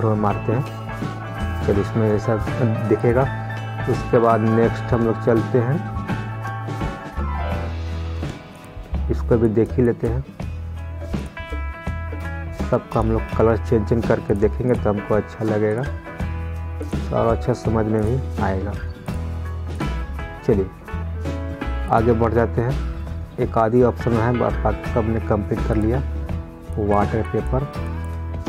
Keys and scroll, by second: 1.7 ctrl+z.